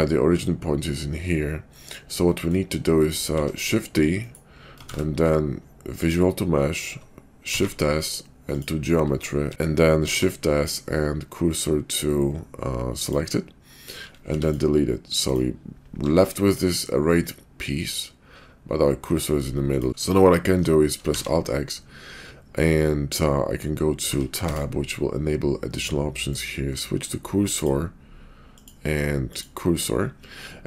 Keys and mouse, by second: 1.7 middle click, 2.2 middle click, 3.3 shift+d, 4.8 ctrl+a, 7.3 shift+s, 9.4 x, 9.5 ctrl+z, 10.1 shift+s, 14.1 x, 16.0 g, 20.3 shift+middle click, 21.0 alt+x, 26.3-28.0 drag, 28.4-30.0 drag.